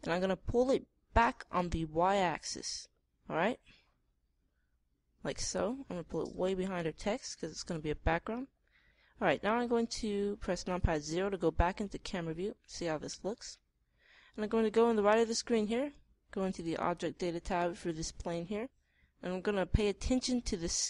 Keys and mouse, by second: 6.4-9.1 middle drag, 9.8-11.6 middle drag, 11.6 KP_0, 17.0-18.9 middle drag.